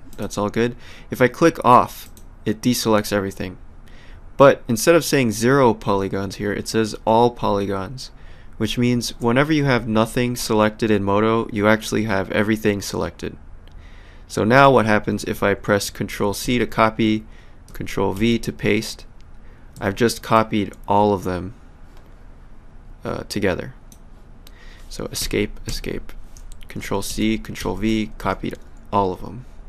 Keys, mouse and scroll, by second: 0.1 click, 2.0 click, 16.4 ctrl+c, 19.7 w, 21.3 click, 25.2 Escape, 27.1 ctrl+c, 27.6 ctrl+v, 28.2 w.